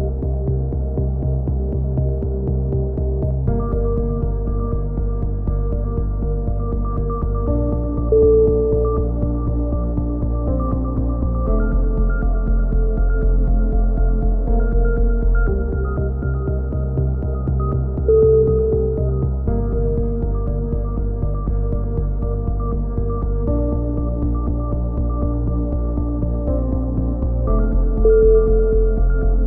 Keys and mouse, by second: 0.0-0.6 drag, 1.0 ctrl+z, 1.5-2.0 right drag, 1.5 KP_3, 2.0 click, 3.6-5.6 drag, 4.6 ctrl+z, 4.9 right click, 5.8 a, 6.0 z, 6.2 z, 6.8 z, 7.0-7.3 drag, 7.3 middle drag, 10.4 z, 10.6 z, 11.9 KP_7, 12.3 z, 14.5-16.9 typing, 18.2-19.0 drag, 19.0 ctrl+KP_3, 19.8 z, 20.0 drag, 20.8 right click, 21.1 KP_3, 21.3 right click, 21.3 z, 22.8 ctrl+z, 23.1 click, 23.8 a, 24.0 middle click, 24.1-24.8 drag, 24.1 z, 25.2-26.6 drag, 26.6 x, 28.0-28.4 right drag, 28.0 f, 28.2 a, 28.4 drag, 28.7-29.2 middle drag.